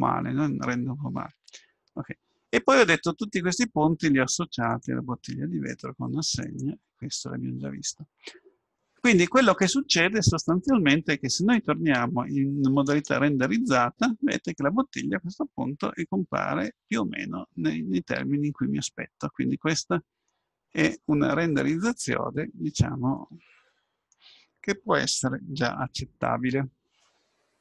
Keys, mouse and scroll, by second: 4.7-8.4 drag, 11.4-13.2 drag, 15.9-17.1 scroll up 2, 17.1-19.1 middle drag, 21.0-25.1 middle drag.